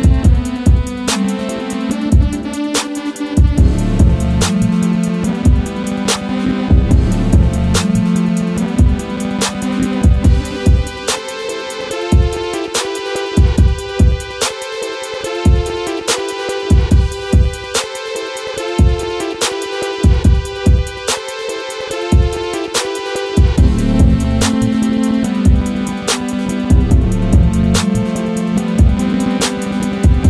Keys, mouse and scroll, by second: 1.7 scroll up 1, 2.0 scroll down 1, 2.2 click, 3.3 scroll up 1, 5.3-6.0 scroll down 1, 6.0 click, 6.3 scroll down 1, 6.8 scroll up 1, 9.3 scroll up 1, 9.8-12.2 drag, 13.2 click, 14.4-15.7 scroll down 1, 15.7-21.0 drag, 21.0 scroll up 1, 21.8-28.8 drag, 28.8 Down.